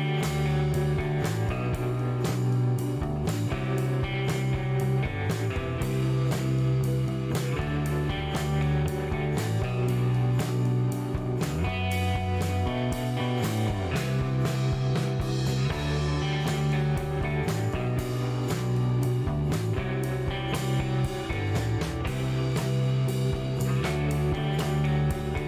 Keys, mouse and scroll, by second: 1.6 click, 2.8 middle click, 3.9 click, 4.7 click, 5.2 scroll up 1, 5.7 scroll down 1, 6.0 middle click, 8.2 click, 9.3 click, 11.1 click, 12.3 click, 13.1 click, 14.1 click, 15.6 click, 16.2 right click, 18.2 click, 19.4 click, 20.8 click, 22.3 click.